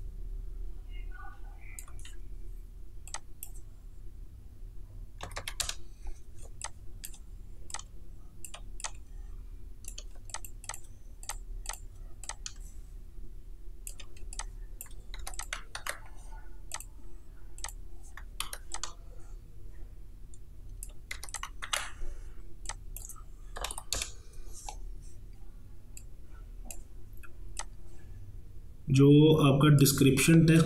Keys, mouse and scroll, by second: 6.5 space, 6.7 click, 7.0 space, 7.8 click, 8.9-10.2 drag, 10.2 space, 10.4 click, 10.7 space, 11.3-14.3 drag, 14.3 space, 14.4 click, 14.8 space, 15.2 t, 15.4 click, 15.8 ctrl+a, 16.8 click, 18.5 v, 18.8-21.2 drag, 21.2 t, 21.4 click, 21.7 ctrl+a, 22.7 click, 26.0-30.6 drag.